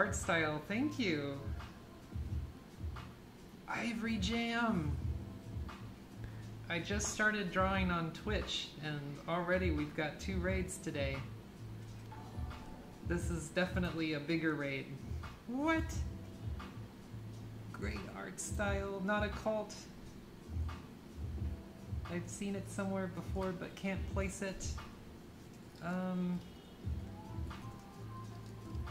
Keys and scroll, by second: 20.8 typing, 22.5-28.9 typing.